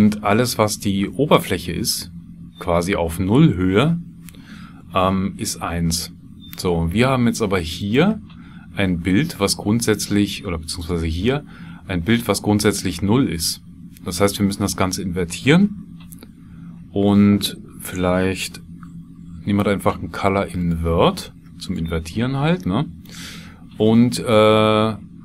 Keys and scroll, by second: 18.4 shift+a, 22.1 shift+a.